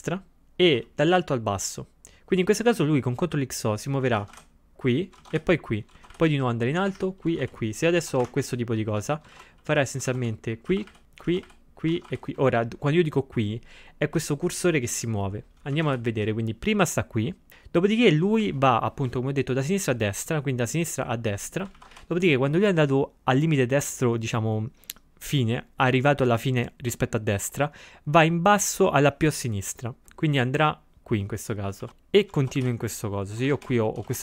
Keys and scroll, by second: 4.2 ctrl+x, 4.3 o, 5.2 ctrl+x, 5.3 o, 5.9 c, 15.8 ctrl+x, 15.9 o, 21.8 ctrl+x, 22.0 o, 31.8 ctrl+x, 31.9 o, 32.4 ctrl+x, 32.6 o, 33.3 c.